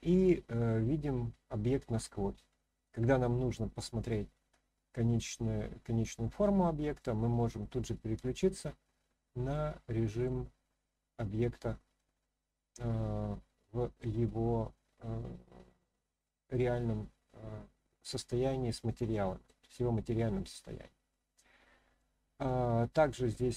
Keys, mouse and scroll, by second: 2.9 click, 4.0-7.0 middle drag, 8.6-8.9 scroll up 1, 8.9-9.5 scroll down 1, 9.5-10.2 middle drag, 10.5-11.3 scroll up 1, 11.3-12.0 middle drag, 13.5-14.0 middle drag, 14.2-14.7 scroll down 1, 14.7-19.5 middle drag, 21.1 middle click.